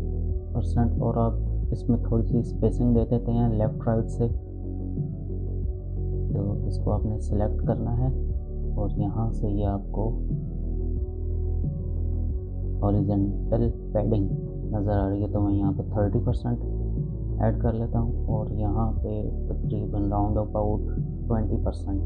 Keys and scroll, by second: 14.7-15.6 typing, 16.0 Return, 20.8-21.8 typing, 21.9 Return.